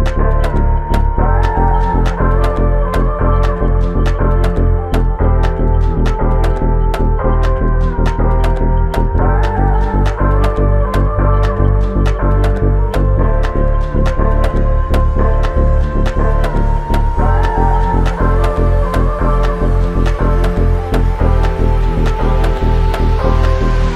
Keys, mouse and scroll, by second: 5.0 alt+click, 16.3 alt+click, 23.0 space.